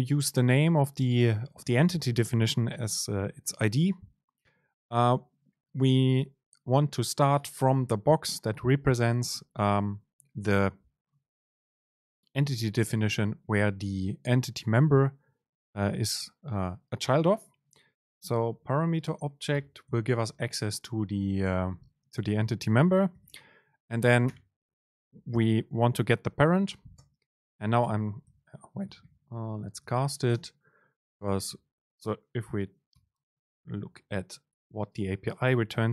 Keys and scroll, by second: 18.9 super+space, 27.1 super+space, 28.4 BackSpace, 30.4 super+space, 31.4 BackSpace, 32.7 super+space, 33.0 Return.